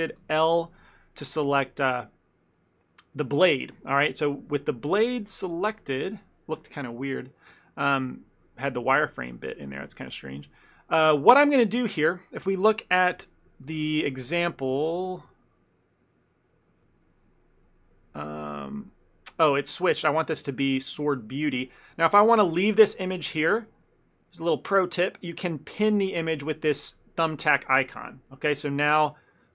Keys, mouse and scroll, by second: 4.1 f, 4.2 ctrl+middle click, 5.3 middle click, 6.6 KP_1, 7.4 ctrl+middle click, 7.7 middle click, 8.7 ctrl+middle click, 9.6 shift+middle click, 9.8 ctrl+middle click, 11.2 ctrl+middle click, 11.6 shift+middle click, 11.8 ctrl+middle click, 12.8 ctrl+middle click, 13.0 ctrl+middle click, 13.1-13.8 shift+middle click, 13.3 ctrl+middle click, 13.4 shift+middle click, 13.7 ctrl+middle click, 14.5 click, 16.9 ctrl+z, 19.6 click, 22.0 shift+middle click, 22.5 shift+middle click, 23.2 shift+middle click, 24.3 middle click, 27.4 click.